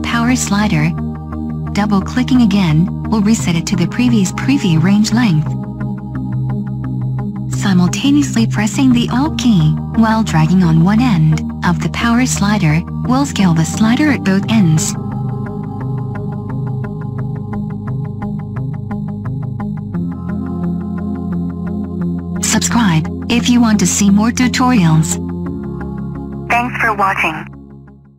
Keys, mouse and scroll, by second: 21.8-24.9 scroll up 5, 24.9-26.7 scroll up 1, 26.7-27.7 scroll up 1.